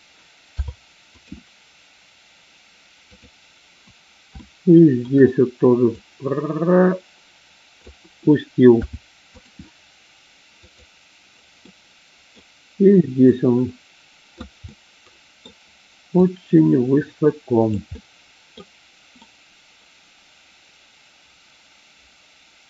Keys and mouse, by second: 3.1 click, 4.4 shift+middle click, 5.9-7.9 drag, 10.6 click, 11.6 middle click, 13.2-14.4 drag, 14.6 middle click, 16.1-17.7 drag, 18.0 middle click, 19.2-20.4 middle drag, 20.6-22.6 middle drag.